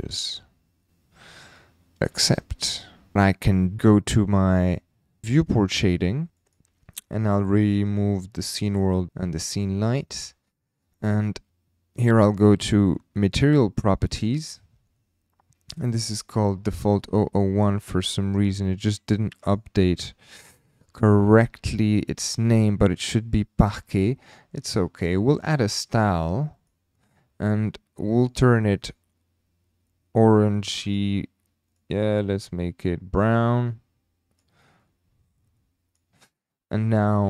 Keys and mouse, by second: 2.1 click, 3.1 shift+middle click, 5.4 click, 6.3-10.4 drag, 13.2 click, 19.4 click, 28.3 click.